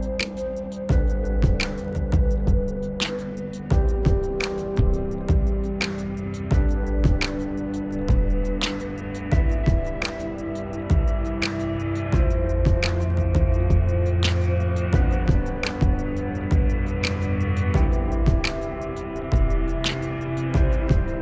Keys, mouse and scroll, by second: 0.4 right click, 1.4 click, 3.3 right click, 4.9 click, 6.2 ctrl+u, 6.4 click, 8.7 right click, 9.7-13.2 drag, 12.8 z, 13.4 ctrl+u, 13.6-17.1 drag, 17.1 shift+Page_Up, 18.1 click, 19.2 ctrl+u, 19.4-21.2 drag.